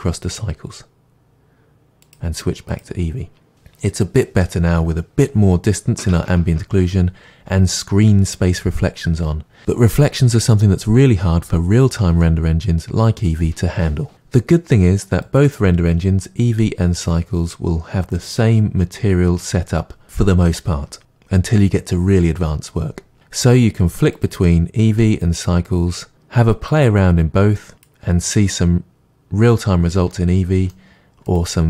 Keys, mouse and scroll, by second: 0.3-30.1 drag, 30.1-31.6 middle drag.